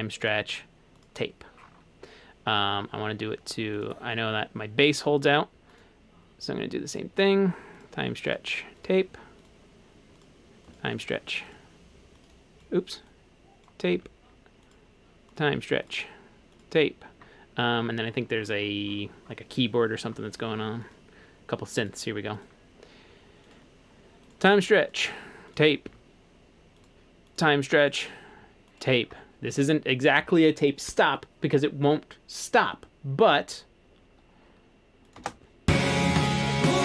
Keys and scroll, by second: 13.9 Page_Down, 25.9 Page_Down, 35.2 space.